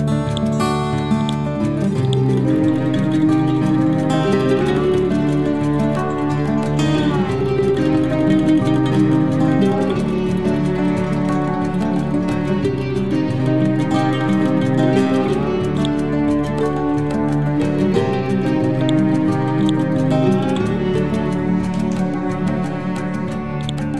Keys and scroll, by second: 3.8 6, 4.3 Return, 9.1 Return.